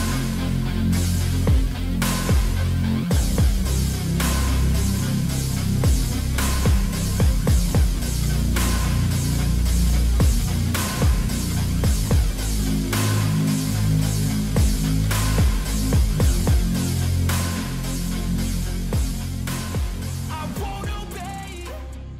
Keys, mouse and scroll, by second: 1.4-2.1 scroll up 1, 2.1 middle click, 4.7 scroll down 1, 9.2 alt+middle click, 9.9 middle click, 11.3-11.9 scroll up 1, 12.4 middle click, 13.1 middle click, 16.7 scroll up 1, 18.0-18.4 scroll down 1, 19.0 scroll up 1, 19.6 middle click, 20.7-21.3 scroll down 1.